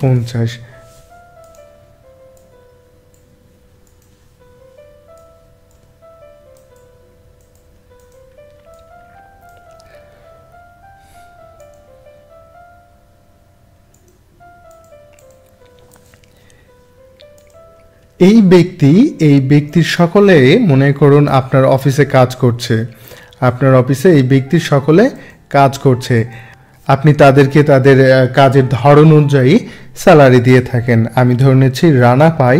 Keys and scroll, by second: 32.2 2.